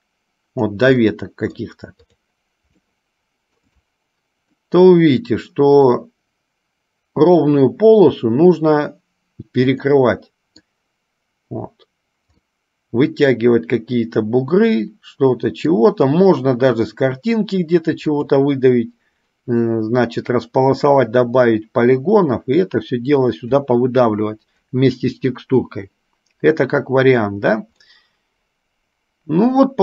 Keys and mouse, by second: 1.2-1.9 middle drag, 2.3-2.7 drag, 3.2-3.9 shift+middle drag, 4.9-6.2 middle drag, 10.0-11.0 middle drag, 12.5-16.0 middle drag, 18.2 click, 28.0-29.8 middle drag.